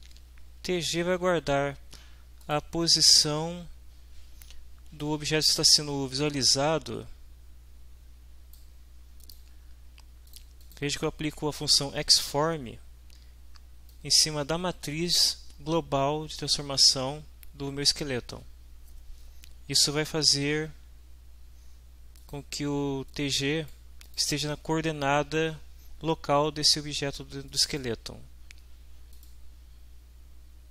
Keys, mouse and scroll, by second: 0.3 Right, 2.4 click, 5.0-8.7 drag, 9.2 click, 10.2 click, 10.6 click, 13.9-17.1 drag, 22.2 click, 23.1 click, 24.0 click, 27.5 click, 29.1 click.